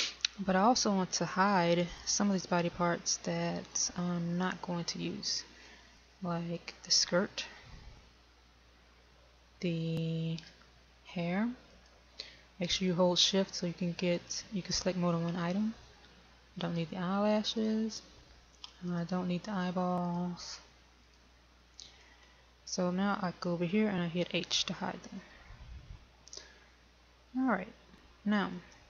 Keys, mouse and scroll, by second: 1.8-3.3 scroll up 1, 3.5 shift+middle click, 7.6 click, 12.7 shift+click, 17.6 shift+click, 18.6 shift+click, 21.2 shift+click, 26.4 h.